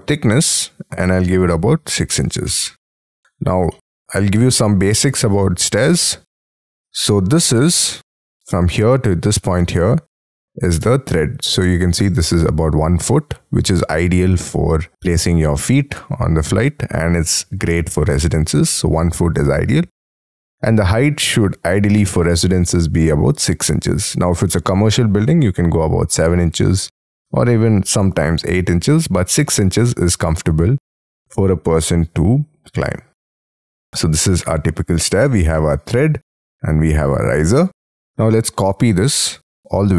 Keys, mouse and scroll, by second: 1.5 6, 2.1 shift+', 2.4 Return, 2.9 space, 3.4 Escape, 3.7 middle click, 6.1-6.6 scroll up 10, 7.1 t, 7.9 Escape, 20.1 Escape, 21.4 middle click, 33.2 scroll down 6, 33.5 space, 34.1 middle click, 37.8 middle click, 38.6-39.8 scroll down 21.